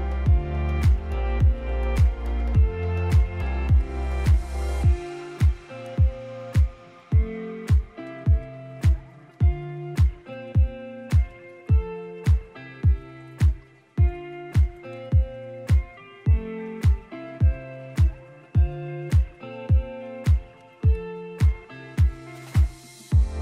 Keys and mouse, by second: 1.3-1.6 middle drag, 1.8 shift+a, 3.8-5.4 typing, 4.6 click, 5.1 click, 6.5 z, 7.2 g, 10.1 ctrl+2, 10.4 ctrl+3, 10.6 Tab, 11.7 ctrl+r, 12.3 click, 12.4 ctrl+r, 14.1 click, 14.3 Tab, 14.4 click, 15.1 click, 15.7 click, 15.9-16.9 drag, 17.2 click, 19.6 click, 19.8 click, 20.0 g, 20.1 z, 20.7 click, 21.0 KP_0, 22.7 click.